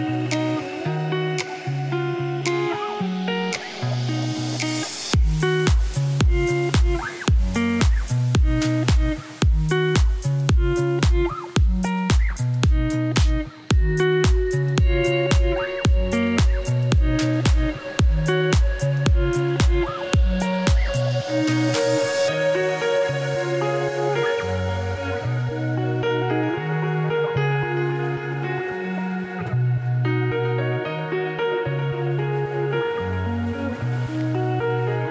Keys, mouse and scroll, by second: 0.1 click, 0.6 middle click, 0.9 scroll down 1, 1.4 shift+middle click, 1.7 click, 3.7 click, 4.8 click, 11.3 click, 13.0 click, 13.8-15.1 drag, 15.1 ctrl+5, 15.6 shift+middle click, 16.3 scroll up 3, 16.5 Left, 16.6 s, 17.3 middle click, 17.8-18.1 scroll down 2, 18.1 shift+middle click, 18.8 scroll up 4, 19.6 middle click, 20.0 click, 20.1-22.2 middle drag, 22.2 click, 22.4-23.4 middle drag, 23.4 click, 24.3 click, 24.8-26.0 middle drag, 27.8 middle click, 27.9 g, 28.4 middle click, 28.6 scroll down 1, 29.9 click, 34.0 click, 34.8 click.